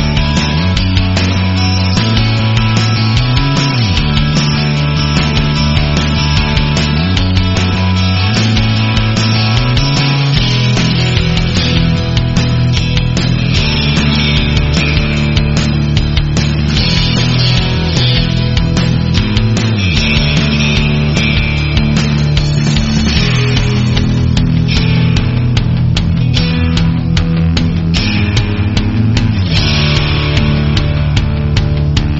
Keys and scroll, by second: 2.7 v, 5.1 o, 7.5 v, 8.1 space, 8.6 alt+super+space, 8.6 alt+super+space, 8.8-9.4 alt+super+space, 10.4-12.5 typing, 13.8-14.7 space, 19.9 a, 21.7 v, 23.3-24.0 typing, 26.1 space, 26.5 space, 29.7 shift+super+F2.